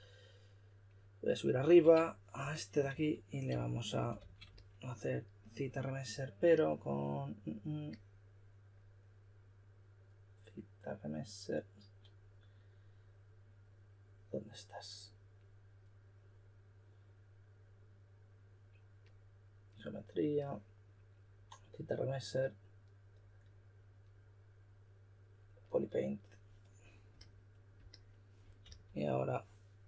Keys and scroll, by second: 2.9-4.7 typing, 28.6 s.